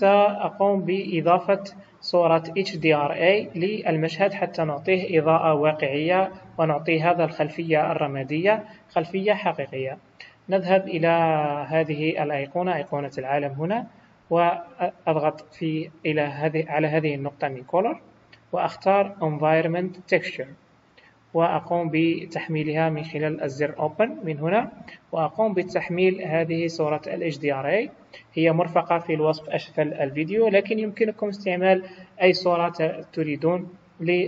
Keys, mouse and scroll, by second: 2.0 scroll down 2, 13.1 click, 17.4 click, 22.8 click.